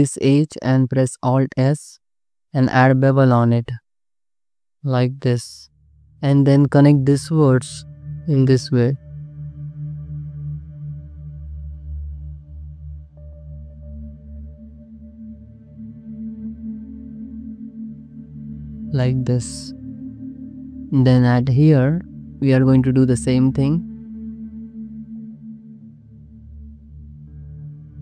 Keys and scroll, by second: 1.2 alt+s, 2.3 3, 3.4 ctrl+b, 4.8 BackSpace, 5.6 1, 7.5 space, 8.9 space, 10.0 2, 11.0 ctrl+x, 11.2 2, 12.3 m, 13.4 2, 14.4 ctrl+x, 14.9 ctrl+x, 15.2 1, 16.4 j, 17.8 j, 18.1 Tab, 18.5 alt+shift+z, 20.1 alt+shift+z, 20.7 Tab, 24.1 2, 24.6 ctrl+b, 25.9 3, 26.7 ctrl+-, 26.8 ctrl+z, 27.0 2, 27.5 ctrl+b.